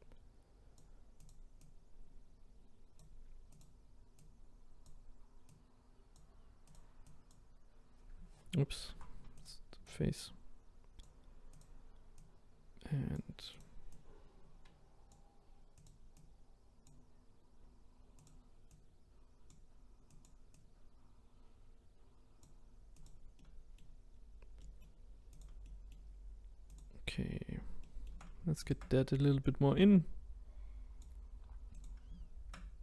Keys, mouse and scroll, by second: 1.3 click, 1.7 click, 3.6 click, 4.2 click, 6.7 click, 7.1 click, 8.8 ctrl+z, 9.4 click, 9.9 click, 12.2 click, 13.6 click, 15.8 click, 16.2 click, 18.3 click, 18.8 click, 20.2 click, 20.6 click, 23.4 middle click, 24.1-24.6 scroll down 2, 24.6 middle click, 25.4 click, 25.6-26.8 middle drag, 26.8 click, 27.1-27.8 scroll up 1, 27.8 shift+middle click, 28.7 shift+click, 31.8 click.